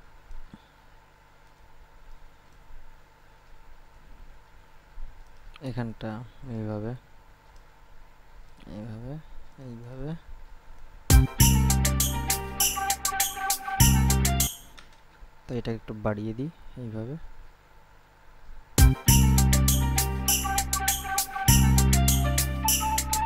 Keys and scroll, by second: 11.3 space, 14.7 space, 18.9 space.